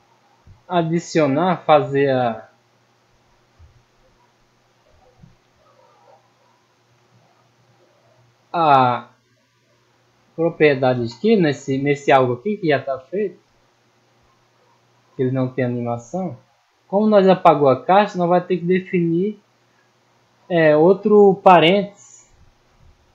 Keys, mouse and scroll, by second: 0.3 right click, 3.1 click, 5.0 click, 5.7-6.2 middle drag, 6.6 right click, 6.9 click, 7.8 right click, 9.8 click, 11.2 click, 11.6-11.9 middle drag, 12.3 middle drag, 12.6-13.4 scroll down 2, 13.4 middle click, 13.8 scroll up 1, 14.7 right click, 17.0 middle click, 18.6 click, 19.0 click, 19.6 middle click, 20.8 middle click, 22.4 click.